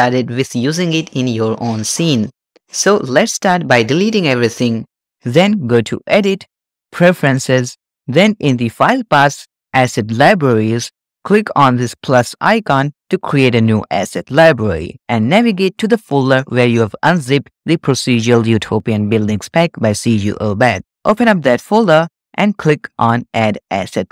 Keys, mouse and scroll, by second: 4.1 a, 4.3 x, 5.1 click, 6.3-7.4 drag.